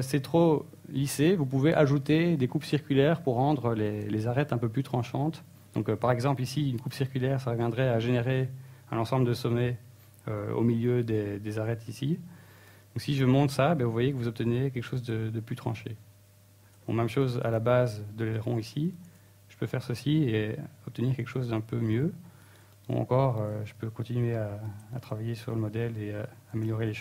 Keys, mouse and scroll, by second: 0.7 scroll down 1, 1.3 Tab, 2.3 middle click, 8.9 Tab, 10.3 ctrl+r, 18.4 Tab, 18.4 click, 20.1 Tab, 20.6 ctrl+r, 22.5 click, 22.6 Tab, 23.3 middle click, 24.6 Tab, 25.2 shift+middle click, 25.8 right click, 26.2 right click, 26.7 shift+right click.